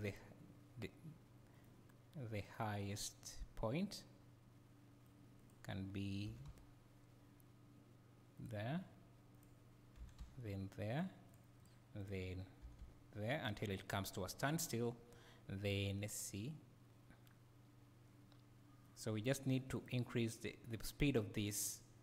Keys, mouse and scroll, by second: 0.8 g, 1.6 right click, 2.4-5.4 right drag, 5.4 click, 6.3 g, 8.4 click, 9.3 click, 10.0 g, 11.3 click, 11.6 click, 12.0 click, 12.6 g, 13.4 click, 15.1-19.9 right drag, 19.9 click.